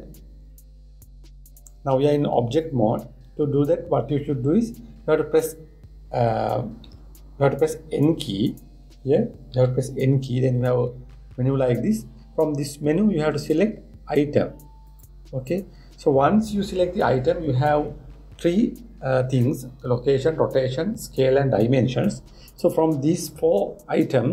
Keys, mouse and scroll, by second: 7.5 n, 10.2 n, 15.7 click.